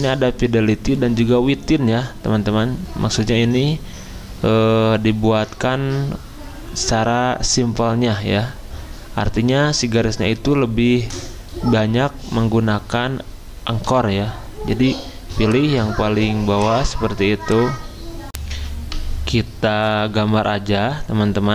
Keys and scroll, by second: 18.3 n, 20.8 d.